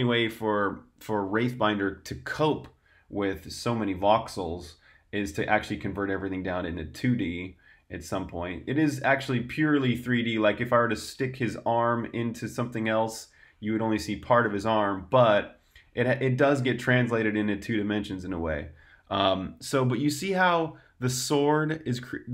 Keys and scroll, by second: 7.6-9.0 typing, 11.0-12.6 typing, 13.7-15.5 typing, 16.6-17.5 typing, 18.7 typing.